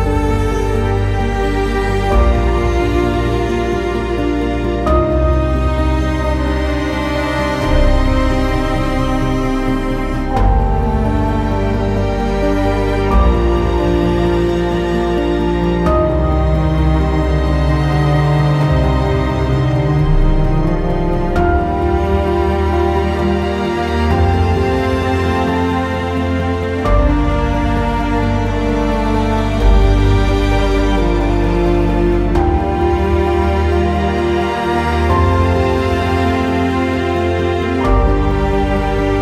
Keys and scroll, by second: 7.1 ctrl+a, 22.1 t.